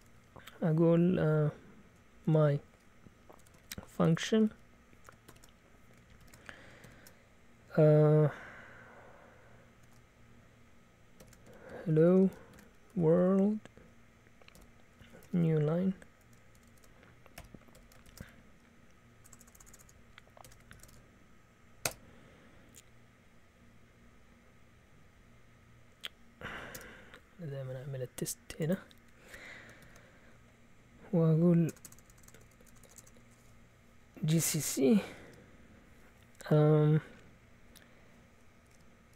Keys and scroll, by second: 1.9-6.8 typing, 9.8 BackSpace, 10.9-21.3 typing, 17.7 Tab, 20.4 Escape, 21.9 Return, 26.7 Return, 29.8 ctrl+l, 31.6-32.3 typing, 33.8-35.2 typing, 38.4-39.1 typing.